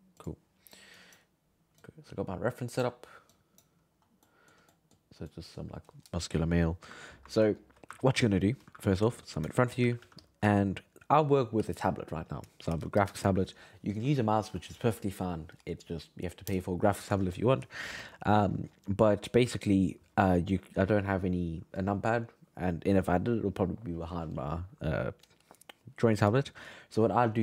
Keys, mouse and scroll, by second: 7.1-8.7 middle drag, 9.5 shift+middle click, 9.8 g, 10.0 f, 10.5-13.7 shift+middle drag.